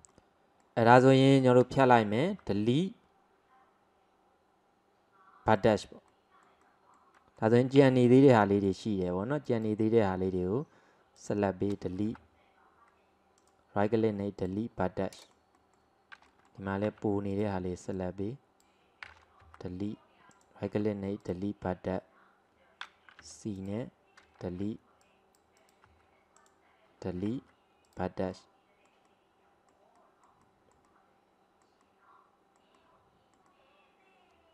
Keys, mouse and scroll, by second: 0.1-2.3 middle drag, 2.3 Delete, 6.1-7.9 middle drag, 7.9 c, 13.9 Delete, 15.1-16.9 middle drag, 16.9 c, 20.8 Delete, 23.3 c, 27.4 Delete, 28.4-34.5 middle drag.